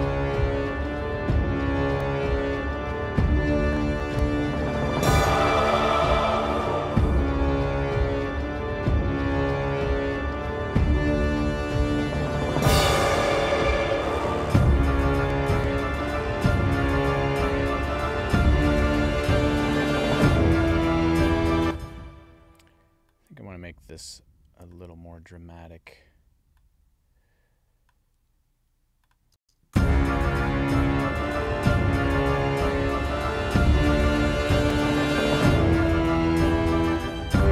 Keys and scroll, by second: 21.5 space, 29.3 space.